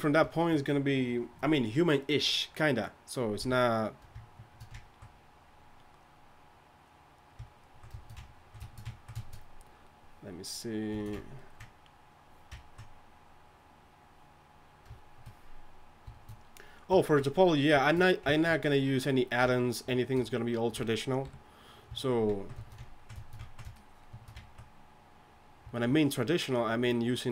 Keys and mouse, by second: 3.4 KP_3, 11.0-12.7 drag, 16.1-21.3 drag, 21.2 KP_3, 24.0-24.4 middle drag, 25.7 middle click.